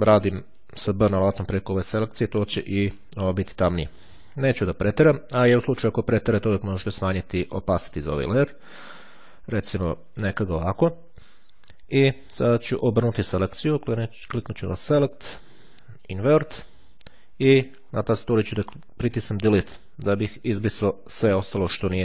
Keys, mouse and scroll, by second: 0.7-3.6 drag, 9.1-9.9 ctrl+scroll down 2, 14.3-15.3 drag, 16.3 click, 19.4 Delete.